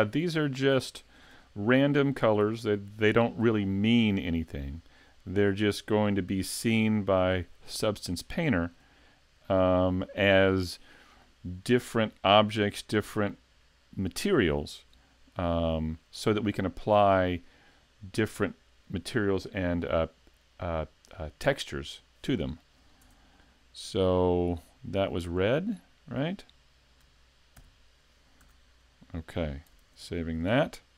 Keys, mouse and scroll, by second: 1.3 l, 2.8 l, 3.6 shift+middle click, 4.3-6.0 scroll up 1, 6.1 l, 7.3 l, 7.8 scroll down 2, 8.3 shift+middle click, 9.0-9.4 scroll down 2, 9.4 shift+middle click, 11.6 scroll down 1, 15.7 shift+click, 16.6 middle click, 18.9 middle click, 23.0 Tab, 25.7 click, 27.5 shift+k, 28.4 a, 29.8 s.